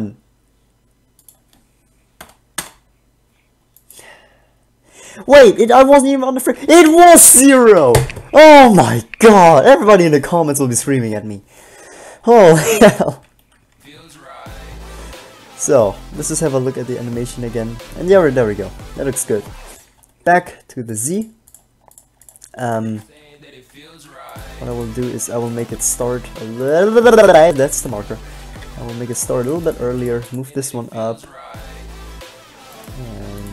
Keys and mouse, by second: 1.4-3.5 drag, 3.9-5.6 drag, 6.2 Right, 13.9 alt+a, 19.9 alt+a, 21.1-22.1 drag, 23.0 alt+a, 23.2 middle click, 25.0 b, 25.6 b, 26.0 shift+d, 27.0 click, 27.8 b, 28.6 shift+d, 30.0 g, 33.0 g.